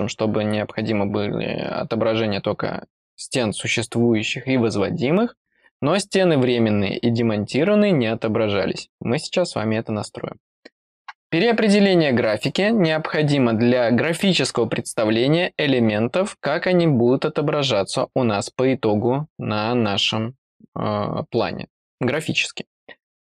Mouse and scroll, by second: 11.7 click.